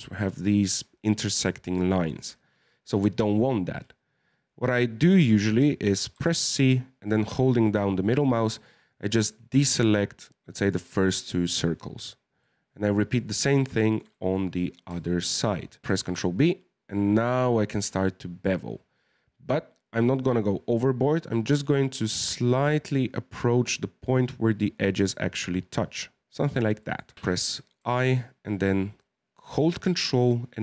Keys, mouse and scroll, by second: 6.1 c, 12.1 scroll down 2, 12.4-14.5 middle drag, 14.5-14.9 scroll up 1, 14.9 c, 15.8 ctrl+b, 26.8 shift+middle click, 27.1 i.